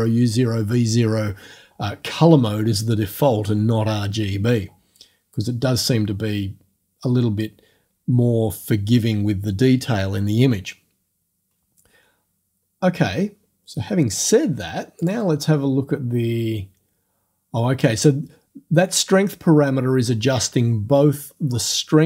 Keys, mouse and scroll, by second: 15.0 click.